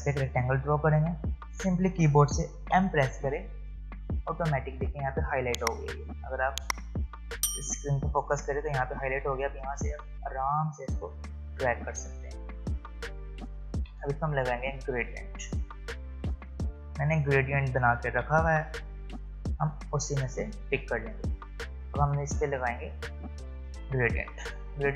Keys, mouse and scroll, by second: 0.1-0.5 alt+scroll down 1, 2.7 m, 11.3-13.7 drag, 15.8 click, 18.1 ctrl+v, 19.8-24.9 drag.